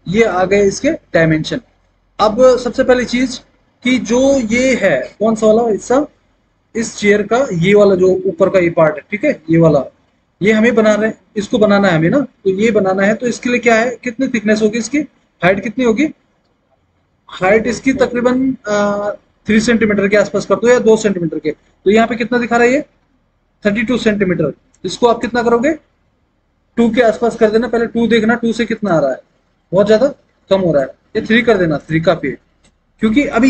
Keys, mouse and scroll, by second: 27.0 KP_2, 28.8 Return, 31.4 KP_3, 31.9 Return.